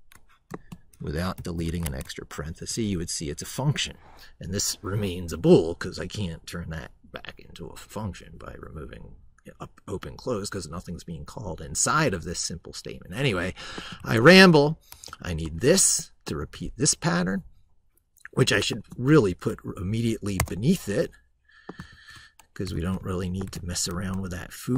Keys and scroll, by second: 14.0 ctrl+a, 21.7 ctrl+v, 22.5 ctrl+z, 23.5 ctrl+a, 23.7 ctrl+c.